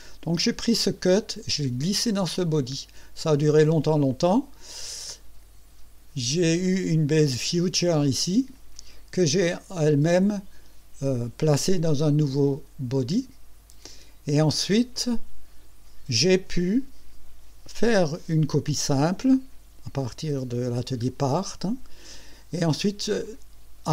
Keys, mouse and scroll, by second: 2.1 click, 12.3 click, 12.9 click, 14.9 click.